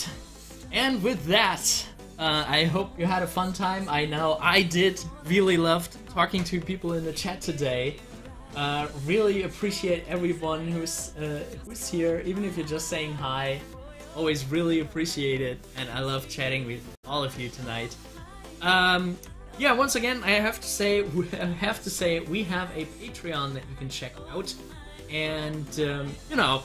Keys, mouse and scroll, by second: 2.0 scroll up 1, 11.2 click.